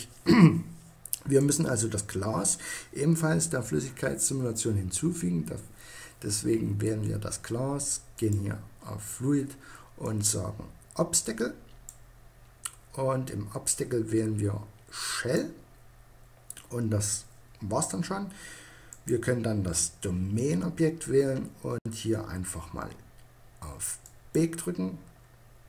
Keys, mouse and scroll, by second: 0.6-2.2 right drag, 7.3-9.1 drag, 10.8-12.8 middle drag, 14.3-18.0 middle drag, 18.0-19.7 right drag, 19.7-23.1 middle drag, 23.1-24.8 drag, 24.8-25.6 middle drag.